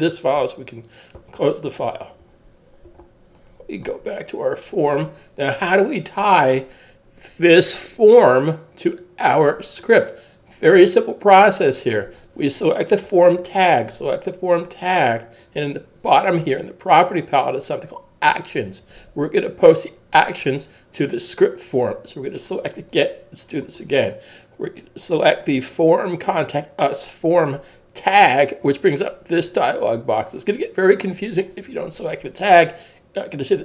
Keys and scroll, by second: 1.2 super+w.